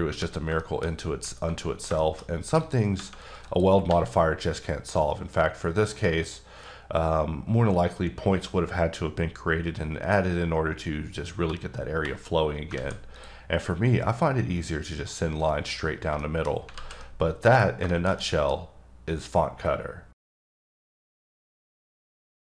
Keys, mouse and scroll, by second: 0.6 shift+middle click, 0.8-1.5 shift+scroll up 3, 1.9-2.6 shift+scroll up 3, 2.0 shift+middle click, 2.6 click, 3.5 click, 3.9 g, 5.9 right click, 11.5 scroll down 2, 12.3-12.7 scroll up 1, 12.7 alt+a, 13.2 click, 15.7-16.1 scroll down 1, 16.2 middle click, 16.5-16.8 scroll down 2, 16.8 alt+z, 17.0 middle click, 18.1 shift+middle click, 18.6-20.1 scroll up 2.